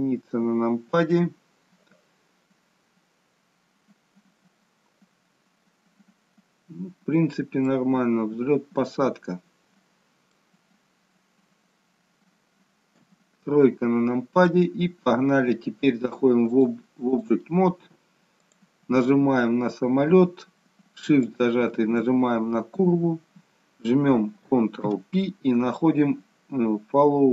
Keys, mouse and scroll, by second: 7.8 middle click, 10.7-12.3 scroll down 1, 12.3-12.9 scroll down 1, 12.9 KP_3, 16.6 click, 18.4 click, 19.3-19.9 scroll up 2, 21.3 shift+click, 25.0 ctrl+p.